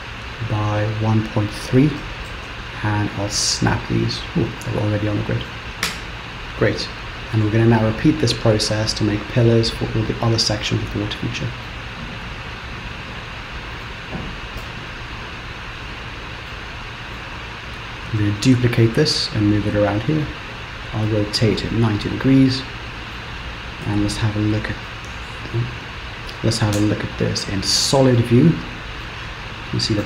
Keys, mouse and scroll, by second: 2.4 shift+s, 4.6 middle click, 5.9 Tab, 6.4-6.7 scroll down 3, 6.7 middle click, 11.0-11.8 scroll down 2, 11.8 middle click, 14.7 KP_7, 15.2-16.2 scroll up 2, 16.5 shift+middle click, 18.4 shift+d, 21.1 r, 22.6 middle click, 23.4-24.0 scroll down 3, 24.0 scroll up 2, 24.9 s, 26.8 z, 28.3 middle click, 29.4-29.8 scroll down 1.